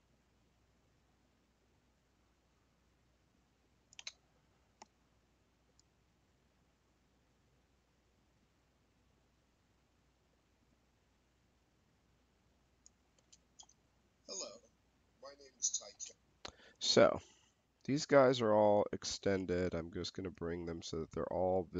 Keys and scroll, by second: 13.0 space, 15.8 space.